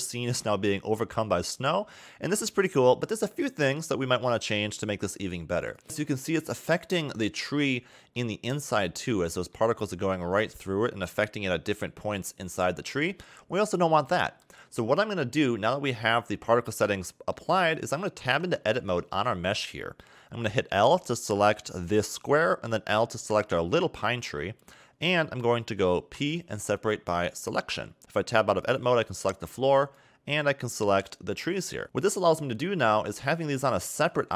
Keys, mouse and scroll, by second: 0.0 middle click, 0.7 scroll up 1, 1.2 middle click, 2.2 middle click, 5.7 click, 5.8 scroll up 5, 6.0 middle click, 7.7 middle click, 8.9 scroll down 2, 9.1 middle click, 11.1 scroll down 1, 11.1 middle click, 11.9 middle click, 12.8 middle click, 14.1 middle click, 14.7-15.2 scroll down 4, 15.2 middle click, 16.4 scroll up 2, 17.0 shift+middle click, 18.3 Tab, 18.8 a, 19.0 a, 20.8 l, 21.4 middle click, 23.1 l, 23.6 scroll up 2, 24.0 scroll down 2, 24.4 middle click, 26.1 p, 28.0 Tab, 28.6 click, 29.8 click, 31.4 g, 32.4 scroll down 1, 32.6 middle click, 33.2 scroll up 1, 34.1 g.